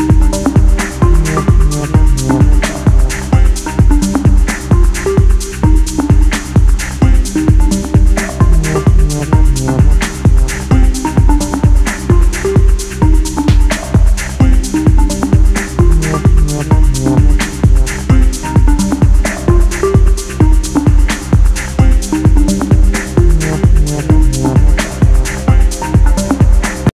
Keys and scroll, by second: 0.3 a.